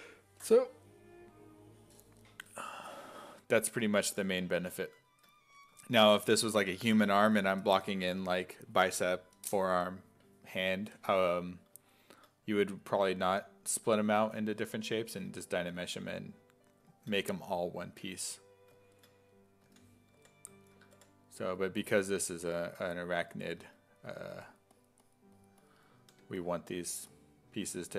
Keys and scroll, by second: 12.6-15.7 typing, 19.6 s, 20.2 5, 21.0 5, 24.1 s, 24.4 1, 26.1 1, 27.7-27.9 typing.